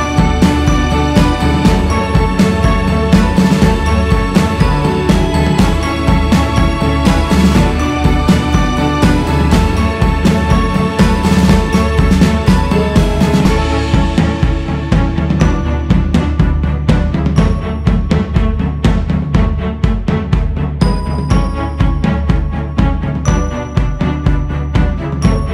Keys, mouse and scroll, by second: 0.1-2.1 drag, 2.1-3.2 scroll down 4, 3.2 click, 3.6 scroll up 2, 4.4-8.7 drag, 8.7 scroll up 1, 9.3-11.3 drag, 11.3-12.4 scroll down 7, 12.4 scroll down 3, 12.7-13.5 scroll up 6, 13.5-14.2 scroll down 6, 15.1 click, 15.6 scroll up 4, 16.3-16.8 scroll up 4, 17.0-20.3 drag, 20.3-20.6 scroll down 1, 21.3 f, 22.6 g, 23.1-25.5 drag.